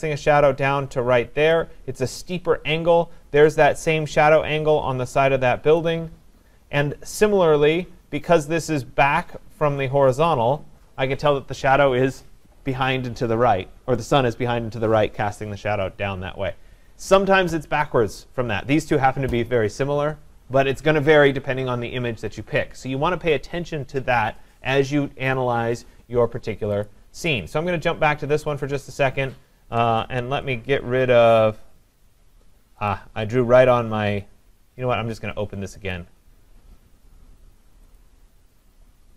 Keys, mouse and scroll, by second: 1.5 click, 5.8 click, 10.3 click, 26.9 click, 30.2 ctrl+alt+z, 32.9 right click, 35.9 click, 38.0 click.